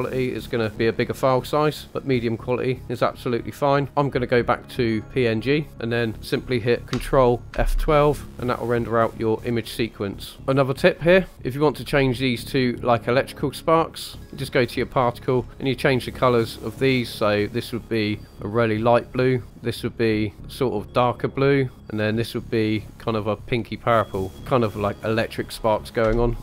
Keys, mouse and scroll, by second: 4.3-5.4 drag, 5.7-6.9 scroll up 2, 11.3 shift+middle click, 12.0-12.3 shift+middle drag, 14.0 click, 14.5 scroll down 2, 14.8 middle click, 15.4-15.8 scroll up 4, 16.3 middle click, 17.2 click, 18.0 click, 18.3 middle click, 18.9 click, 20.0 click, 22.2 click, 22.8 click.